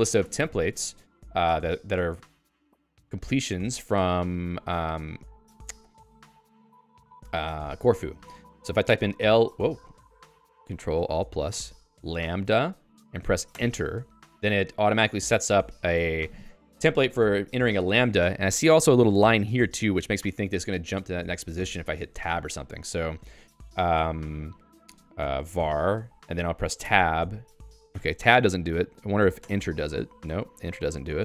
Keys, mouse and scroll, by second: 1.1 Down, 2.0 Up, 8.3 alt++, 9.1 l, 9.9 i, 11.7-12.5 typing, 13.5 Return, 25.1-26.1 typing, 26.8 Tab, 27.9 Tab, 29.4 Return, 30.2-31.2 typing.